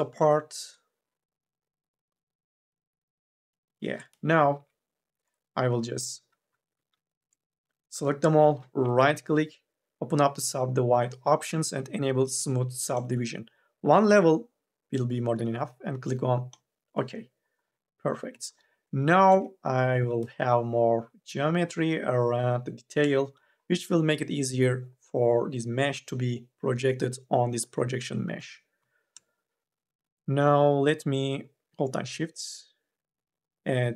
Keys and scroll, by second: 3.9 3, 4.4 1, 5.7 3, 7.1 ctrl+z, 7.4 3, 8.0 ctrl+a, 19.8 3, 20.0 e, 28.6 4.